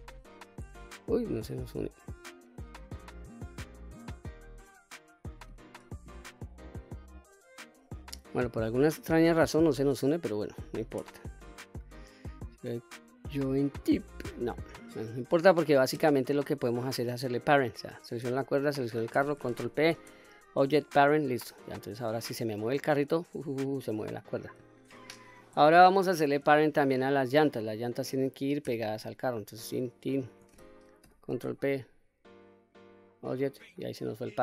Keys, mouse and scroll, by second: 1.5-2.0 scroll down 1, 2.0-2.4 middle drag, 2.8 click, 4.0 click, 5.0 click, 9.8 click, 10.4 shift+click, 11.7-14.0 right drag, 14.9 click, 16.5 scroll down 1, 16.6-16.9 middle drag, 17.8 click, 18.6 shift+click, 19.9 ctrl+p, 21.6 click, 22.1 click, 23.2-24.5 drag, 25.2 ctrl+z, 25.9-26.5 shift+middle drag, 28.2 click, 29.6 shift+click, 30.0 shift+click, 31.2 ctrl+p, 33.7-34.0 scroll down 1, 34.0 click.